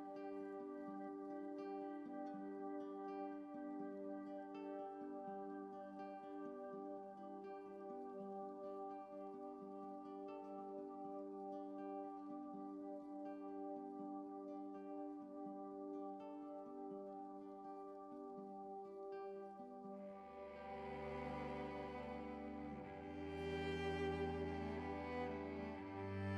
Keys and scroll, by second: 5.5 ctrl+z, 5.6 ctrl+z, 6.1 ctrl+z, 12.7 7.